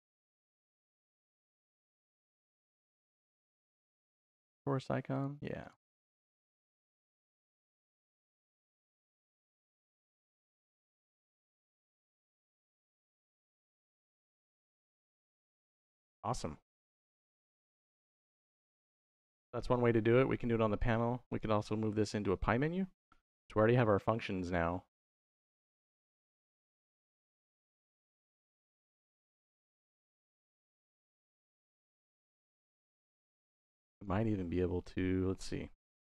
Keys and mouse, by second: 1.3-5.3 drag, 5.4 click, 6.4-7.4 drag, 8.1-9.2 drag, 11.6 click, 12.7 click, 14.5-16.1 shift+middle drag, 16.3 middle drag, 17.0-18.4 shift+middle drag, 19.0-19.3 middle drag, 21.1 middle click, 22.0 middle click, 24.5 middle click, 25.2 click, 26.1 shift+a, 30.9 middle click, 33.8 click.